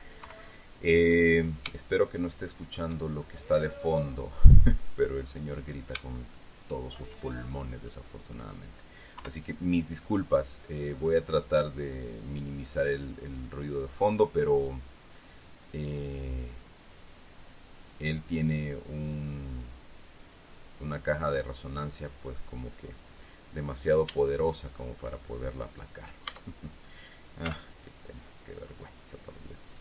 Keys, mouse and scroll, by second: 0.8 KP_3, 2.5-3.5 shift+middle drag, 3.5-5.1 shift+scroll up 1, 5.1-6.5 scroll up 1, 6.9 shift+middle click, 8.4 middle click, 9.7 KP_3, 11.5-14.6 drag, 16.9-22.0 drag, 24.7 shift+middle click, 26.8 Tab, 28.0 z, 29.2 scroll up 2.